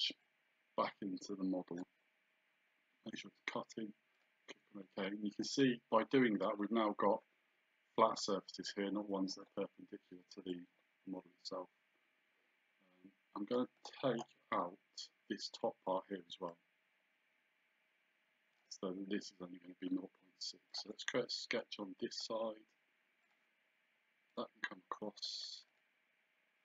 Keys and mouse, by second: 0.3 click, 4.2 click, 5.5 click, 10.7 click, 16.5 click, 20.7 click, 23.3 click, 24.3 click, 25.7 click.